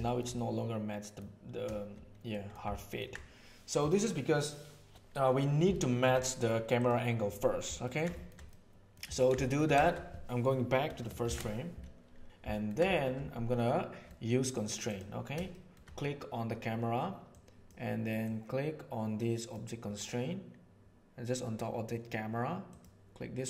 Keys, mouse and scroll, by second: 0.3-1.1 middle drag, 2.3 middle click, 2.7 ctrl+middle click, 5.7-6.1 shift+middle drag, 6.8 click, 7.8 ctrl+middle click, 8.1 shift+middle click, 8.5 middle click, 9.1 ctrl+middle click, 9.4 shift+middle click, 11.2 shift+Left, 12.5 ctrl+middle click, 12.8 shift+middle click, 13.6 click, 15.5 shift+middle click, 17.3-17.7 drag, 18.2 click, 22.8-23.4 drag.